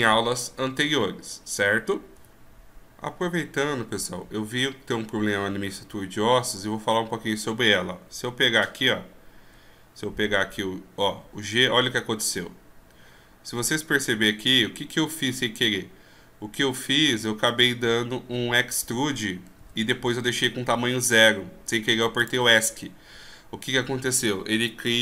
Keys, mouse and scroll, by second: 11.6 g.